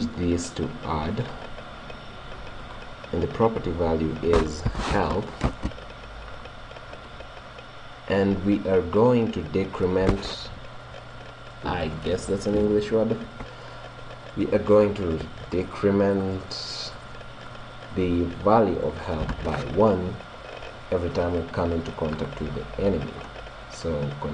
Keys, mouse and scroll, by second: 2.7-4.6 drag, 7.0-8.9 drag.